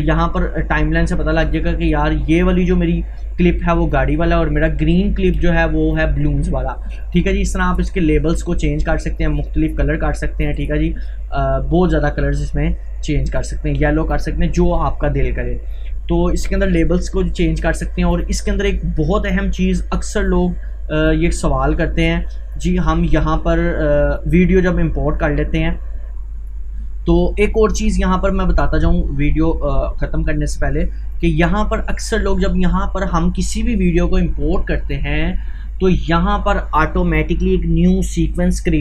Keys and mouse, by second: 7.6 right click, 9.2 click, 10.6 right click, 13.3-22.9 drag.